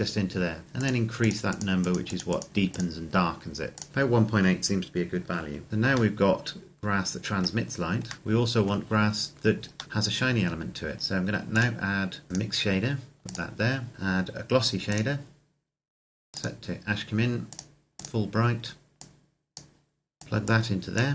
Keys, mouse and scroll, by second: 5.7-6.1 scroll up 1, 6.1 middle click, 9.2-9.8 scroll down 1, 9.8 middle click, 11.4 click.